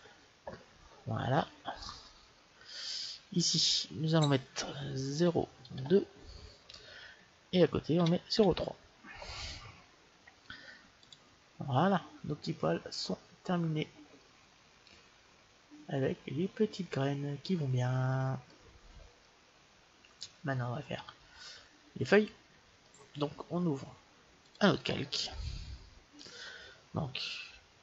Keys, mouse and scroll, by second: 3.5-5.3 drag, 13.4-16.0 middle drag, 18.8-21.1 middle drag, 24.3-26.2 drag, 26.0 middle click, 27.4 click.